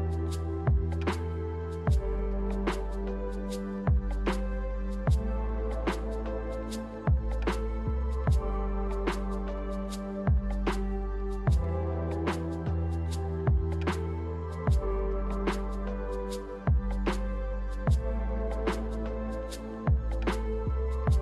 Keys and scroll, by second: 0.9 z.